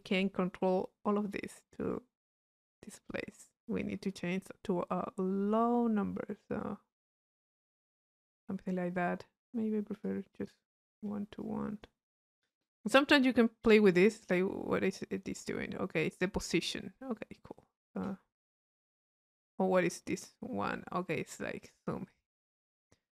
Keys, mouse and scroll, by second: 0.0-1.4 drag, 1.4-8.1 middle drag, 10.1-11.1 drag, 11.4-12.5 drag, 12.9-17.2 middle drag, 12.9-14.6 scroll up 1, 14.6-15.7 scroll up 1, 17.2-18.5 drag, 18.7 click, 19.9-22.9 drag.